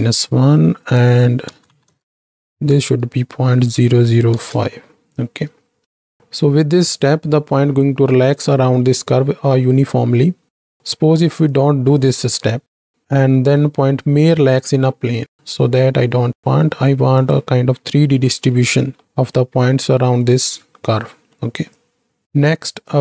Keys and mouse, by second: 0.8-4.9 drag, 2.0 KP_0, 6.3-7.0 right drag, 9.1 middle click, 9.3 click, 9.3 right click, 10.6 KP_7, 11.4-13.0 drag, 13.0 m, 13.1-13.6 middle drag, 17.1 click, 18.3 m, 19.0 middle drag, 21.2 middle click, 21.9 click, 22.9-23.0 drag.